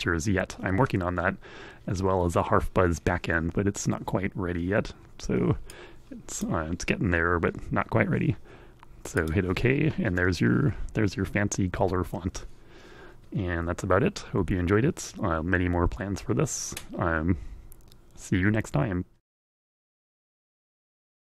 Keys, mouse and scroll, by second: 5.1 click, 8.5 click, 20.0 scroll down 1.